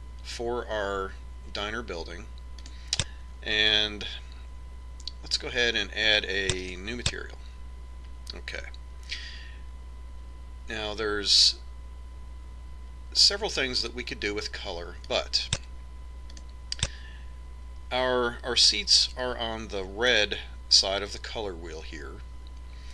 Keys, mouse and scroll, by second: 3.0-4.9 drag, 7.0-8.6 drag, 15.5-18.6 drag.